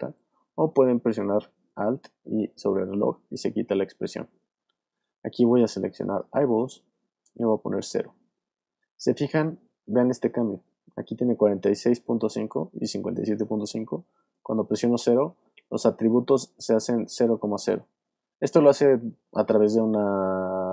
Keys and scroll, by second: 9.7 super+z.